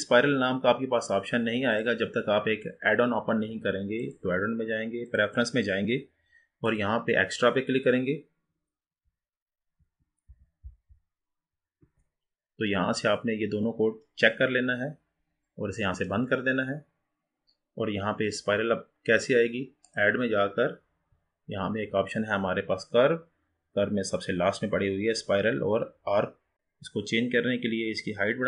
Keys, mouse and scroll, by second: 20.0-23.2 drag.